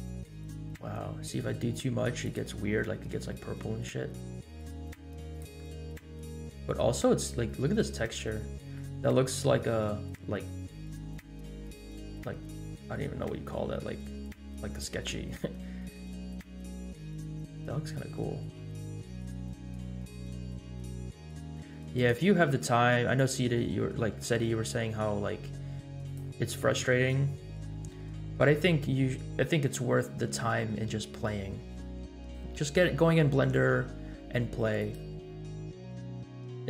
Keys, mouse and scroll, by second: 3.8 g, 5.6 middle click, 6.5-6.8 scroll up 3, 7.6-8.4 scroll up 2, 8.5 scroll down 2, 8.8-9.2 shift+middle drag, 9.4-9.9 scroll up 1, 12.0 scroll down 2, 13.2-13.7 scroll down 2, 16.4 scroll up 2, 17.3-17.7 scroll down 3, 18.4 g, 22.5 r, 23.6-24.2 middle drag, 24.5 middle click, 25.0 g, 26.7 scroll up 2, 32.9-33.5 middle drag, 33.8 g, 35.6 scroll up 1.